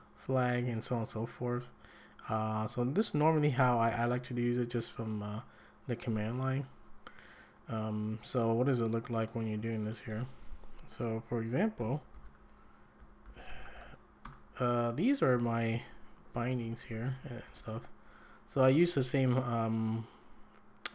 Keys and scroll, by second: 10.2 `, 11.8 ctrl+l, 11.9-14.1 typing, 14.2 Return, 15.2-17.9 typing.